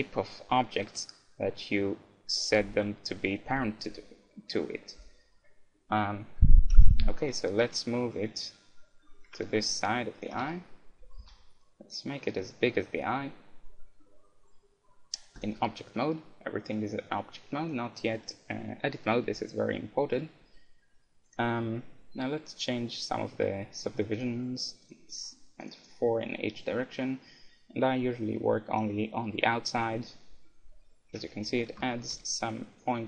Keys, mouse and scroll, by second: 6.7 KP_1, 7.6 middle click, 8.4-10.1 drag, 10.5 z, 11.0 z, 11.2 s, 15.6-17.2 drag, 17.2-19.1 middle drag, 21.3-23.2 drag, 23.7-27.7 drag, 31.2 Tab, 31.5 z, 31.9-33.0 middle drag, 32.2 z, 32.7-33.0 drag.